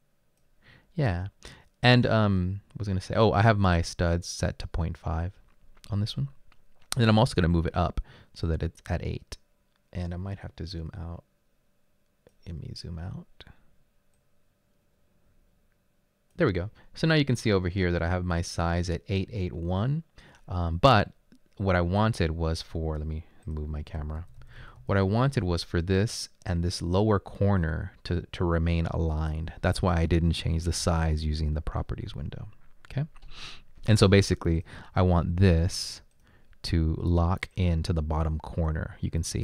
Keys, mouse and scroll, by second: 20.3 click, 23.4-25.3 typing.